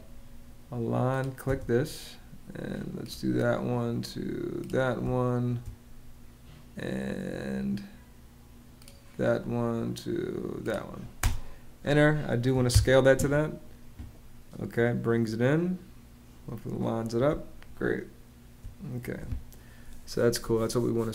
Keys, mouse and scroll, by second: 1.2 space, 4.9 space, 10.9 space, 12.3 y, 12.4 Return, 17.0 space.